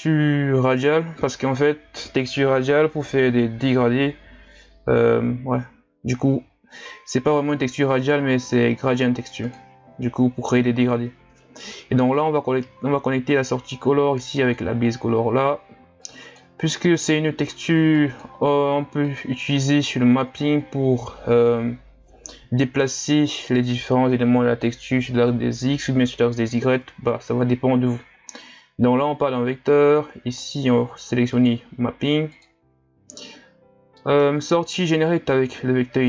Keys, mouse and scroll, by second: 32.3-36.0 drag.